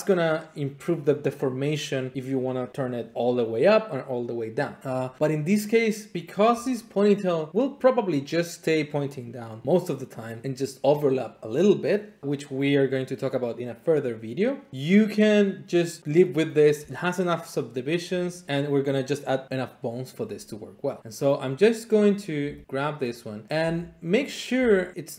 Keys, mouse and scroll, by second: 22.2 click, 22.4 g, 23.1 click, 23.4 click, 23.6 g, 24.2 click, 24.5 e.